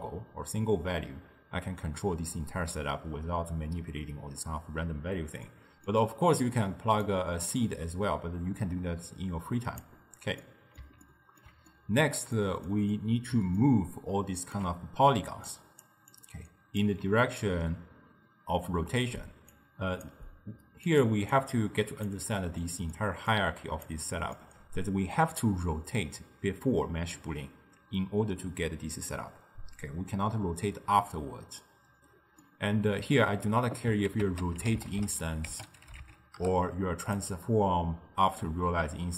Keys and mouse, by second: 5.5-7.1 middle drag, 7.1-10.2 drag, 10.5-15.2 middle drag, 15.2 d, 15.5-15.9 drag, 15.9 d, 16.2 click, 16.9 d, 19.4 d, 19.6 click, 20.9 click, 21.4 click, 22.7-23.4 middle drag, 23.4 drag, 24.4-27.4 middle drag, 32.5-34.2 middle drag, 34.2 ctrl+a.